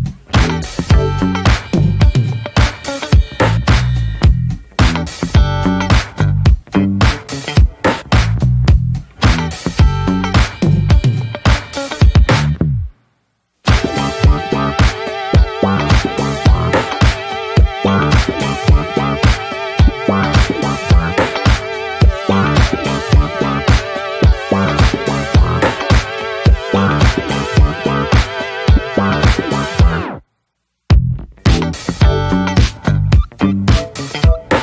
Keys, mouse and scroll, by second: 0.8 3, 1.3 click, 1.6 scroll up 1, 1.9-3.0 alt+shift+drag, 3.0 middle click, 3.8-4.1 alt+shift+drag, 4.1-4.7 middle drag, 4.7-5.0 alt+shift+drag, 5.0-5.7 middle drag, 5.7 alt+shift+click, 6.1-6.5 shift+middle drag, 6.5 scroll up 1, 6.7-7.3 middle drag, 7.3-8.0 scroll up 1, 8.0 alt+shift+click, 8.3-8.7 scroll down 1, 8.7-9.5 middle drag, 9.5 scroll up 2, 9.7-10.2 shift+middle drag, 10.2-10.8 scroll up 1, 10.8-11.2 alt+shift+drag, 11.2-12.0 middle drag, 12.0 alt+shift+click, 12.3 scroll down 1, 12.5 shift+middle drag, 14.2 right click, 14.4 a, 14.8-15.6 right drag, 15.6 scroll down 1, 15.9-16.5 middle drag, 16.5 scroll up 1, 16.7-17.2 middle drag, 17.2 ctrl+s, 17.4 drag, 17.7 middle click, 18.2-18.8 scroll up 1, 18.8-19.2 drag, 19.2 middle click, 19.9-20.3 shift+drag, 20.3-21.4 middle drag, 21.4-21.7 shift+drag, 21.7-22.3 middle drag, 22.3-22.8 shift+drag, 22.8 right click, 23.6 s, 26.5 right click, 27.1 scroll down 1, 27.3-28.4 middle drag, 28.4-28.8 scroll down 1, 28.8 Tab, 29.0 middle click, 29.2 Tab, 29.6-30.2 middle drag, 30.2-30.8 scroll up 1, 30.8-31.2 drag, 31.2-31.9 middle drag, 31.9 Tab, 32.2 middle click, 32.5 ctrl+s, 32.6 scroll down 1, 32.8-34.1 middle drag, 34.1 ctrl+s, 34.3 click.